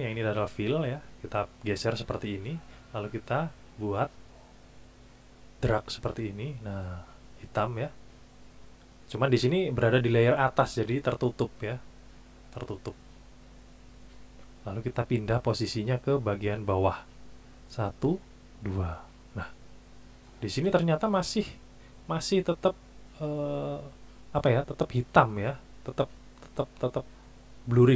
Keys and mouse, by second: 1.6 click, 4.2-6.2 drag, 13.6 click, 15.4 click, 15.9 click, 17.6 click, 18.3 click.